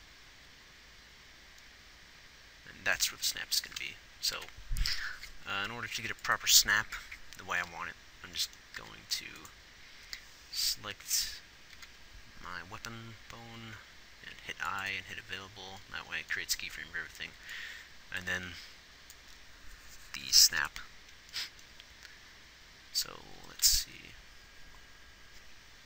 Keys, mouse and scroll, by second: 0.0 click, 2.1-4.7 middle drag, 4.7 Left, 6.4 ctrl+s, 9.1 a, 24.1 Left.